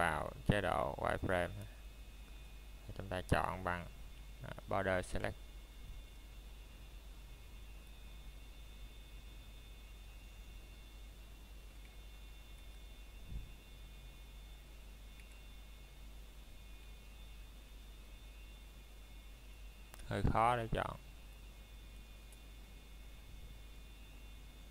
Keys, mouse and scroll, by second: 3.0 a, 3.6 middle click, 3.8-6.1 scroll down 1, 6.4 scroll up 1, 12.6 shift+Num_Lock, 12.6-13.2 scroll up 1, 13.9 z, 15.1 click, 15.7 shift+middle click, 17.6 b, 19.8 click.